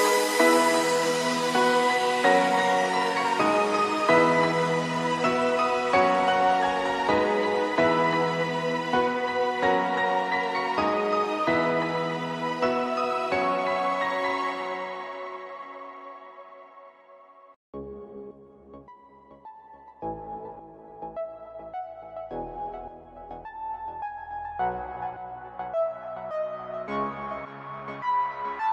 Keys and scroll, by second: 0.3 ctrl+=, 8.2 ctrl+=, 8.5 space, 8.8 ctrl+=, 18.2 space, 27.7 space.